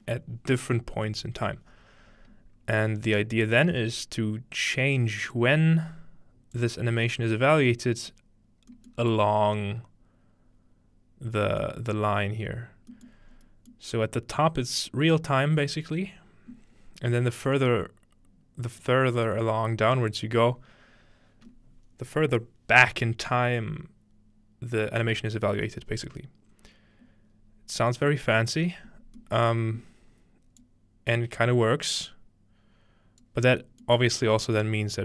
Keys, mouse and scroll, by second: 3.4-5.4 drag, 6.6-8.1 drag, 8.9 click, 9.0-10.7 middle drag, 12.4 middle click, 13.1 middle click, 13.3-14.6 scroll up 1, 13.7-15.4 middle drag, 14.6-15.2 scroll up 1, 27.9-28.7 scroll up 1, 28.1-28.9 middle drag, 28.7-30.3 scroll down 3, 29.8-33.3 middle drag, 30.6-33.3 drag, 33.6 click, 33.9 middle click, 34.1-35.0 scroll up 1, 34.9-35.0 middle drag.